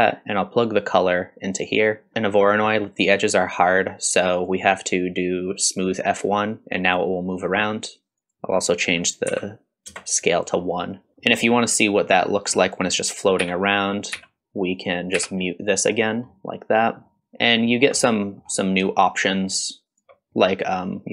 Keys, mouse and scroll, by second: 0.6-1.9 drag, 2.1 middle click, 4.3-6.0 drag, 8.2-10.5 drag, 11.1 scroll up 2, 11.2 middle click, 12.6 click, 13.4 m, 14.2 m, 14.8 click, 15.2 m, 16.3-17.0 middle drag, 16.3-16.9 scroll down 1, 17.2-17.7 scroll up 3, 17.7 scroll down 1, 18.0 middle click, 19.1-21.1 shift+drag.